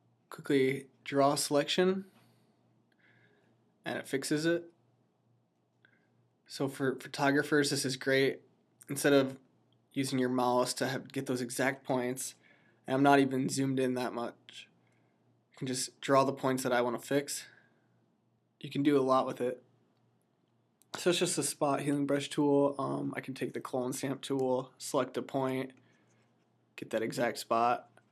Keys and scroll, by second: 1.3 typing.